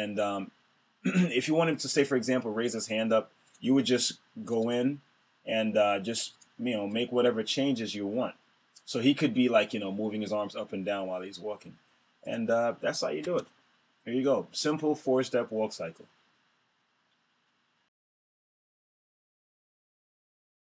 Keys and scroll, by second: 13.2 super+Return.